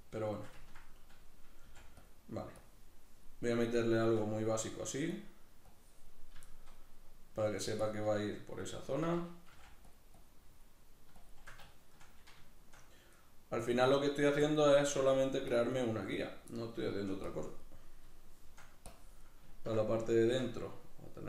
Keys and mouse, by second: 0.0-1.6 middle drag, 1.6 f, 2.1 click, 3.5-5.1 middle drag, 5.1-6.5 drag, 6.5-7.5 shift+middle drag, 7.5-9.9 shift+drag, 9.5 f, 11.2 shift+click, 11.7 shift+middle click, 13.6-15.3 drag, 15.0 f, 16.6 middle click, 17.3 click, 17.8 middle click, 18.9 click, 19.6 ctrl+middle click.